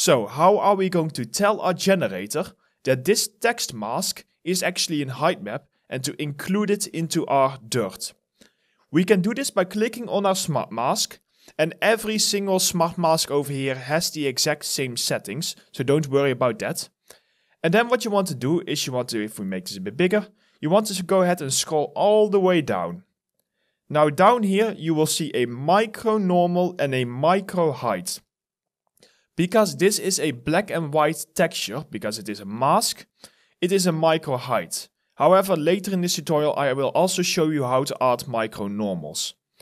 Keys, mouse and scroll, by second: 7.1 alt+middle click, 7.6 alt+right click, 21.0-23.0 scroll down 1.